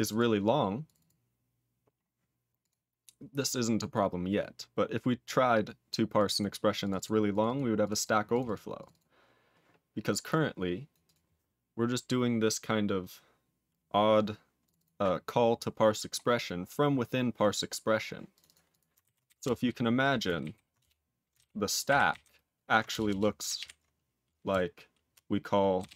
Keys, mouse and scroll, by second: 0.1 double click, 0.8 click, 0.9 double click, 1.7-2.0 scroll up 5, 2.6 click, 3.4-4.3 scroll down 6, 4.3 scroll down 3, 4.8-5.7 scroll up 15, 6.2 click, 6.2 double click, 6.8 click, 6.9 double click, 7.3 click, 7.4 double click, 7.8 click, 7.9 double click, 8.3 click, 8.4 double click, 8.7 click, 8.9 double click, 10.2 click, 10.9 click, 11.0 click, 14.6 click, 14.8 double click, 15.8-16.9 scroll up 12, 17.5-18.3 scroll down 16, 18.3 click, 18.4 double click, 18.7 click, 19.3 Return, 20.4 ctrl+n, 20.8 Return, 21.3 ctrl+/, 21.8 ctrl+o, 22.1 ctrl+n, 22.9 Return, 23.0 Return, 23.5 ctrl+p, 25.5-25.9 typing.